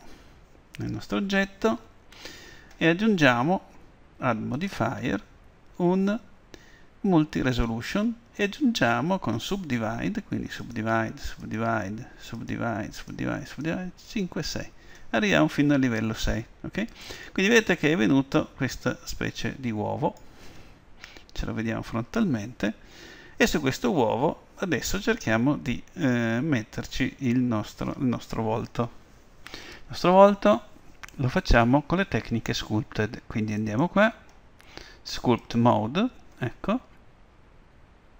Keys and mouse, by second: 4.6-6.5 drag, 10.6-16.0 drag, 19.0 middle click, 21.3 KP_1, 33.6-35.5 drag.